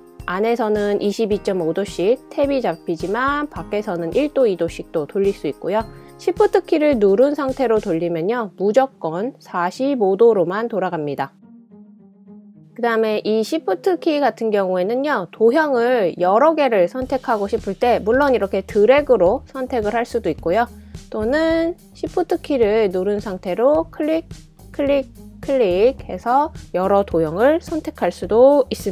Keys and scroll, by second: 12.7 super+c, 13.1 super+v, 14.8 super+v.